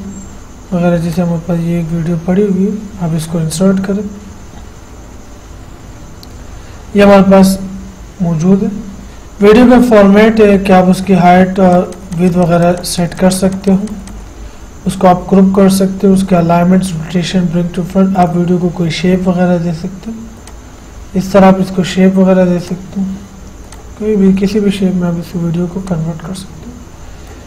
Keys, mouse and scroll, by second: 3.5 click, 11.9 click, 18.5 click, 20.7 click, 22.8 click, 26.1-27.4 drag.